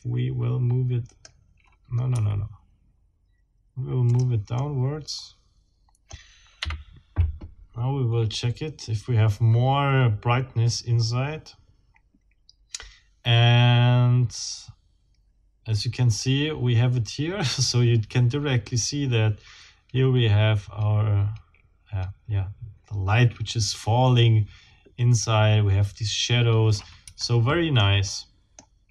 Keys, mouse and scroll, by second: 2.1 Escape, 4.1 click, 4.4 scroll down 1, 4.6-6.3 middle drag, 6.6 F12, 27.1 Escape, 27.8-28.8 middle drag.